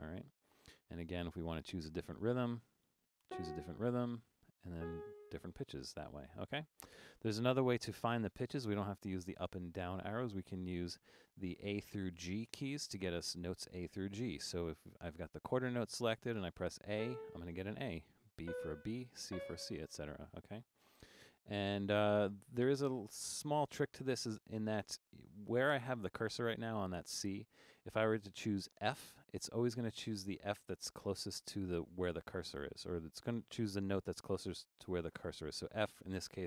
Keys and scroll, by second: 1.4 5, 3.3 Return, 4.3 Up, 4.8 Return, 17.0 a, 18.2-19.3 typing.